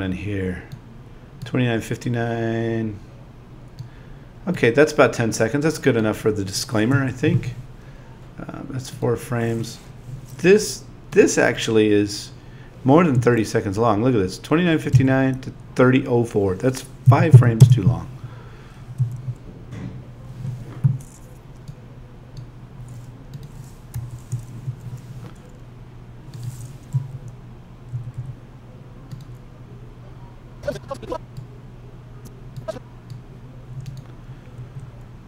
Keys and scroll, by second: 6.9 Page_Down, 13.1 Up, 14.9 Down, 17.1 -, 19.0 Page_Down, 23.9 •, 26.9 Page_Down, 34.6 Up.